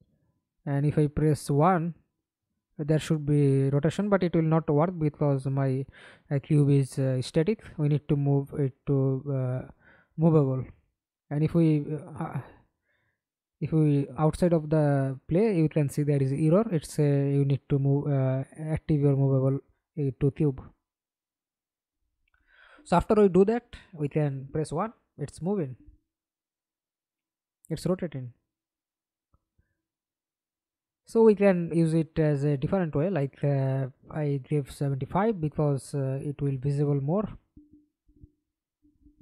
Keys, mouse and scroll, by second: 0.6-2.8 typing, 4.5 1, 6.7 1, 7.5 Escape, 7.7 middle click, 8.5 F11, 12.6-13.5 drag, 13.9 click, 18.1 double click, 18.9 middle click, 19.9 F11, 20.8 alt+p, 21.8-23.2 typing, 24.6 1, 26.3 Escape, 26.8 middle click, 27.7 F11, 29.4-30.8 scroll up 2, 30.8-32.5 scroll up 1, 32.2-33.2 typing, 34.0 right click, 37.6-38.7 typing, 39.1 Return.